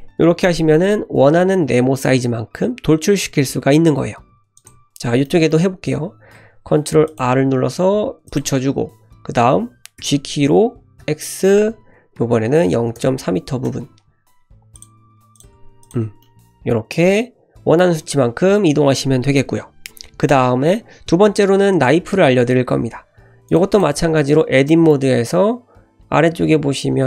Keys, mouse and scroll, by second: 4.6 click, 4.8 Tab, 5.3 middle click, 6.3 ctrl+r, 10.0 g, 14.8 click, 15.1 3, 15.4 click, 15.6 e, 16.1 Tab, 16.2 middle click, 23.5 click, 23.7 click, 24.0 Tab, 24.7 middle click.